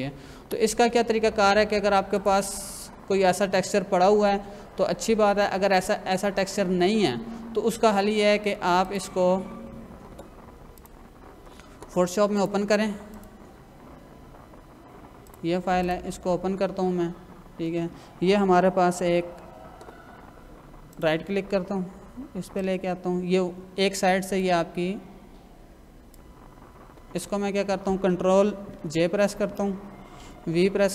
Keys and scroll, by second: 0.4 Escape, 19.0 ctrl+=, 28.7 ctrl+j, 30.2 v.